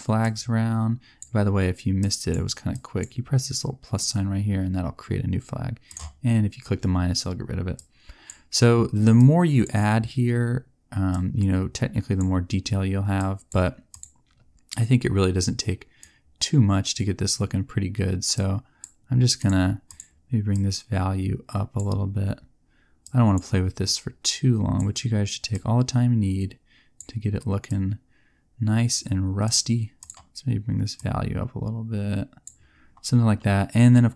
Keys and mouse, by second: 12.9 middle click.